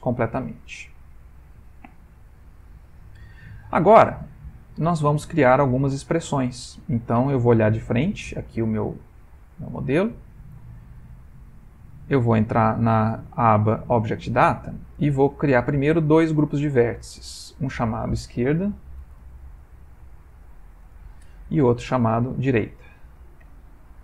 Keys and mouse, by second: 0.8 shift+middle click, 1.3 middle click, 2.8 ctrl+middle click, 3.2 shift+middle click, 5.7 middle click, 9.3 click, 10.3 ctrl+middle click, 12.1 click, 15.9 click, 16.8 click, 17.5 click, 17.6 click, 20.3 BackSpace, 22.1 click, 22.2 click.